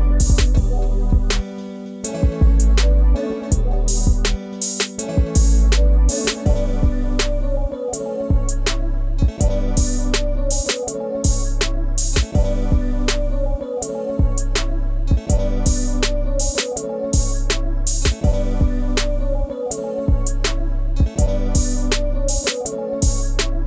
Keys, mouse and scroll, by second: 0.0-0.7 typing, 2.3-3.5 typing, 4.9-6.3 typing, 7.4 r, 7.6 space, 9.6 t, 14.3 i, 15.1 l, 17.5 Return.